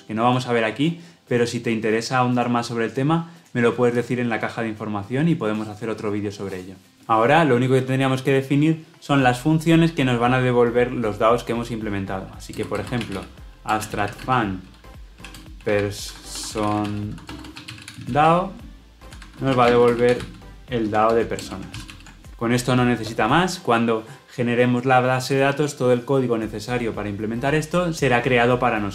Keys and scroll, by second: 13.6 Return, 21.3 Return, 21.6 ctrl+alt+l, 21.8 ctrl+alt+o.